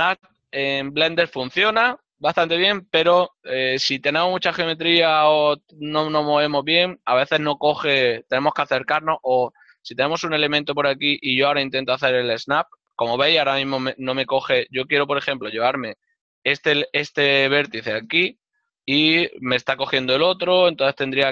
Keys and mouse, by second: 16.4 right click, 18.3 g.